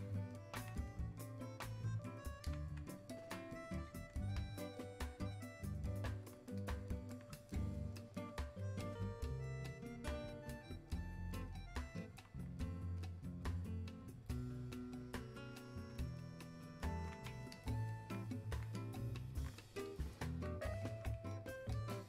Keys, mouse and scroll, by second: 2.4-3.9 alt+drag, 6.6-21.7 alt+drag, 21.7-22.0 alt+drag.